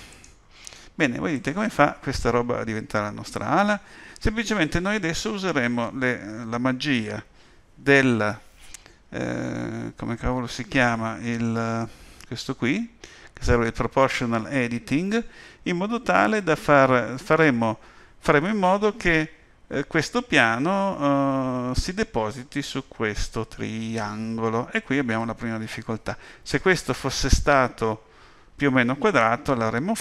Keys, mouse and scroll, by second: 1.3 click.